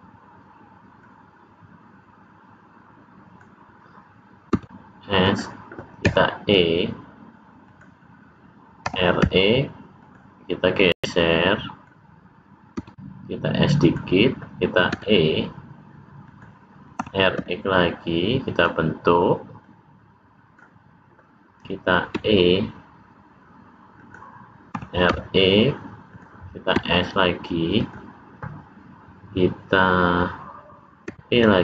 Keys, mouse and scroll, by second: 0.9 click, 4.4 s, 6.0 e, 8.7 r, 10.8 click, 12.7 s, 14.8 e, 16.9 r, 19.5 click, 22.1 e, 24.6 r, 26.6 s, 31.0 e.